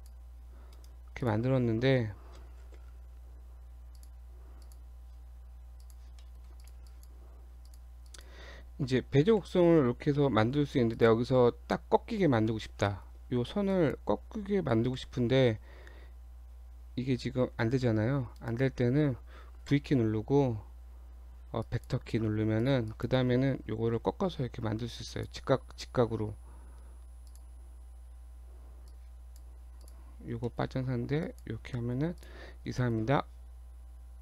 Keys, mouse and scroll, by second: 0.8 right click, 1.3 click, 1.5-2.2 scroll up 1, 2.4 scroll up 1, 2.6 ctrl+z, 3.6 Tab, 3.9 click, 4.6 click, 5.0 Tab, 5.8 click, 6.3 shift+middle click, 6.6 click, 6.9 click, 7.7 click, 8.1 click, 9.4 g, 12.2-12.7 shift+scroll up 3, 12.9 shift+middle click, 13.8 click, 15.0 g, 19.7 v, 22.7 click, 22.9 click, 24.0 g, 25.9 g, 27.8-28.9 scroll down 1, 28.9 click, 29.8 click, 30.2 scroll down 2, 30.5 shift+middle click, 30.9-31.3 scroll down 1, 31.3 click, 31.7 shift+middle click, 32.2 click, 32.5-32.8 scroll down 2, 32.8 shift+middle click.